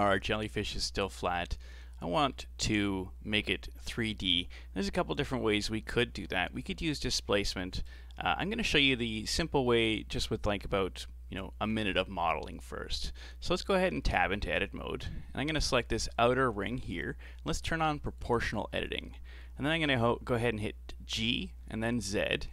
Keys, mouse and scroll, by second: 0.0-1.1 middle drag, 1.1-1.5 scroll up 2, 1.5-4.3 shift+middle drag, 4.3-5.4 scroll down 2, 7.9 click, 9.4-12.4 middle drag, 14.0 Tab, 14.1-14.6 scroll up 3, 14.6-15.5 scroll down 3, 15.7 alt+right click, 18.0 click, 18.8-21.6 middle drag, 21.6 g.